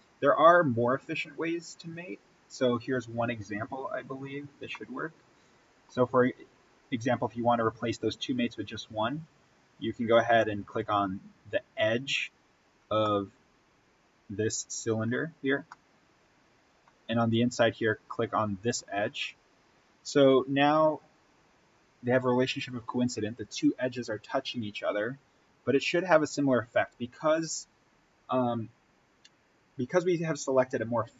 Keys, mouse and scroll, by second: 2.0-3.3 scroll up 1, 4.7-10.7 middle drag, 10.7 click, 12.2-12.7 scroll up 1, 12.9-18.6 middle drag, 18.6 click.